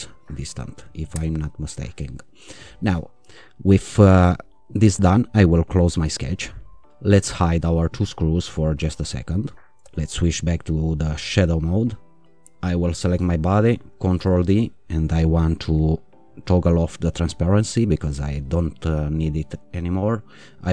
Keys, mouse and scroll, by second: 0.4 5, 1.1 Return, 5.7 click, 7.8 click, 9.1 click, 9.8 q, 11.7 click, 13.1 click, 14.1 ctrl+d, 16.5-18.0 drag, 20.4 click.